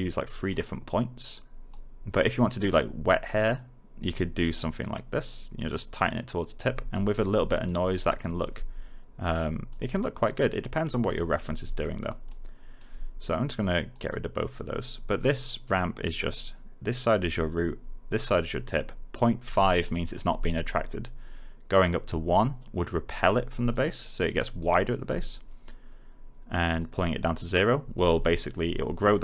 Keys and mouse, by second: 7.4 alt+middle click, 7.9 alt+click, 11.7 alt+right click, 12.2 alt+click, 19.7 alt+middle click, 22.3 click, 23.6 alt+right click, 26.7 click, 28.2 alt+middle click, 28.7 alt+right click, 29.0 alt+click.